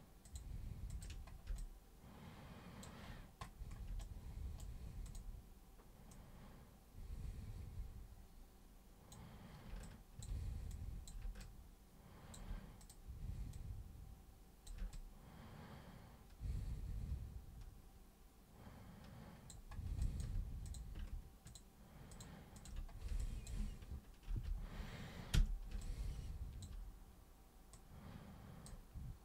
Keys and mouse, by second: 0.2 ctrl+shift+super+click, 0.9 ctrl+shift+super+click, 1.6-2.8 alt+super+drag, 4.0 right click, 5.1 click, 6.1-19.5 drag, 20.0 alt+click, 20.7 click, 21.5 ctrl+shift+super+click, 22.1 ctrl+shift+super+click, 27.8-28.7 super+drag.